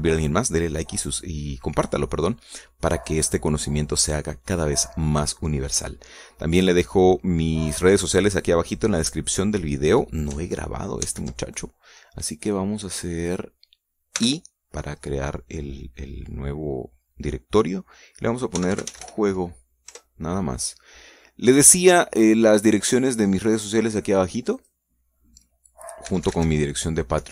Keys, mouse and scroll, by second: 12.0 ctrl+s, 13.9 click, 15.2 i, 15.9 click, 19.6 j, 19.8 u, 20.0 o, 21.0 Return, 24.6 click, 25.6 click, 27.1-27.3 typing.